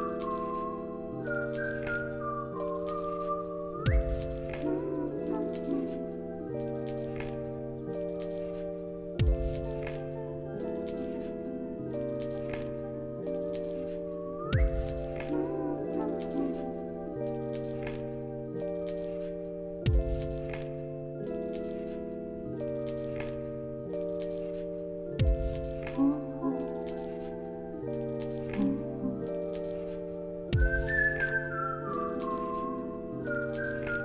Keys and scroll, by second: 1.5 ctrl+v, 2.3 ctrl+v, 2.9 ctrl+s, 5.6 ctrl+a, 8.2 space, 16.1 space, 19.0 space, 23.9 ctrl+s, 32.6 t.